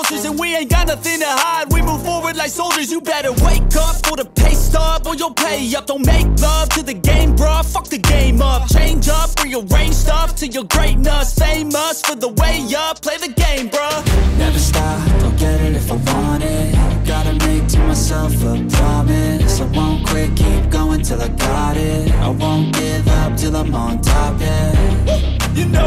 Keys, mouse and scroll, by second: 2.8 double click, 12.0 double click, 16.2 double click, 22.7 double click.